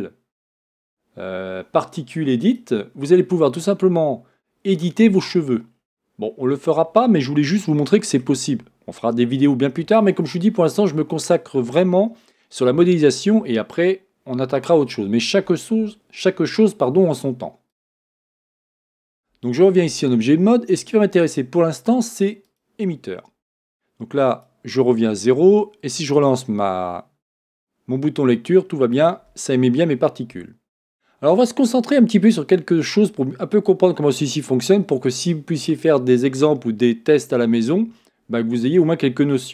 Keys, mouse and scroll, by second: 5.7-6.2 scroll down 1, 6.2-6.9 scroll up 1, 6.9-7.6 scroll up 1, 7.6-17.7 shift+middle drag, 17.7-22.5 drag, 26.1-27.7 drag, 28.9-39.5 drag.